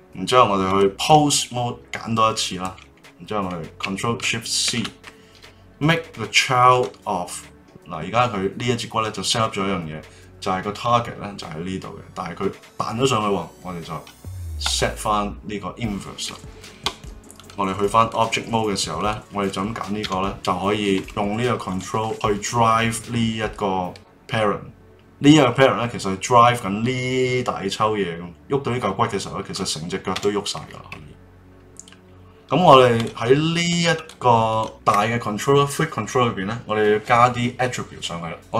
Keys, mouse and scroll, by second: 0.6-1.7 drag, 4.6 ctrl+shift+c, 7.6 click, 14.6 click, 17.3-19.1 drag, 20.0 g, 21.6 click, 22.0-24.6 middle drag, 30.1 g, 32.3-33.0 middle drag, 33.0 click, 33.5 click, 33.9 click, 34.5 click, 38.4 click.